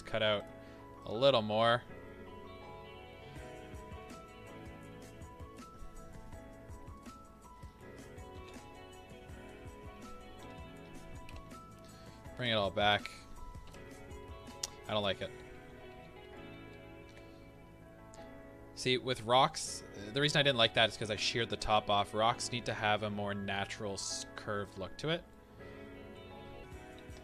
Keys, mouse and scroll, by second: 1.0-6.9 drag, 7.3 scroll down 1, 7.6-13.0 middle drag, 8.4 alt+a, 10.8 Tab, 11.3 alt+h, 13.0 click, 13.7 KP_1, 15.0 ctrl+z, 25.2-26.6 middle drag, 26.6 KP_7, 27.0 shift+d.